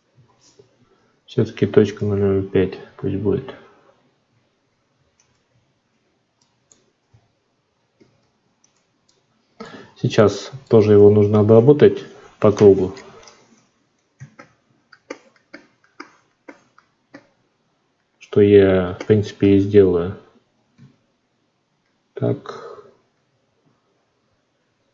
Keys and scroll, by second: 0.1 F9, 7.9 alt+v.